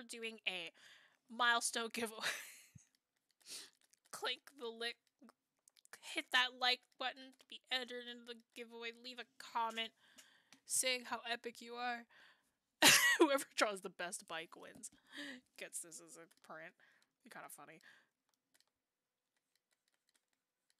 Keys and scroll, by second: 0.9 ctrl+z, 5.6 ctrl+z.